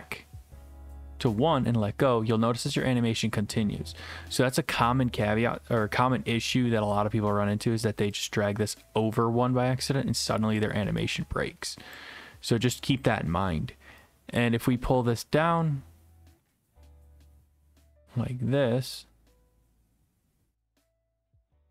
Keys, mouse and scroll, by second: 1.3 click, 9.1-10.2 drag, 12.0-13.0 drag.